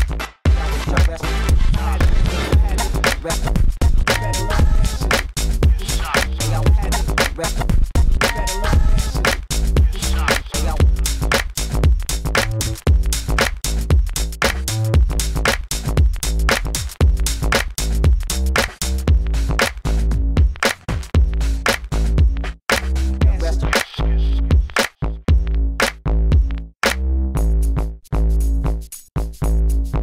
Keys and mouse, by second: 4.8 f, 5.2 s, 5.4 f, 5.5-7.0 drag, 7.3 f, 9.9 f, 11.1 s, 14.1 Tab, 15.0 g, 16.1 Tab, 16.9 s, 17.0 f, 18.8 s, 23.3 Tab, 23.8 g, 24.2 g, 25.4 g, 26.0 Tab, 27.1 Tab, 27.6 g, 28.2 g, 29.0 Tab, 29.6 s.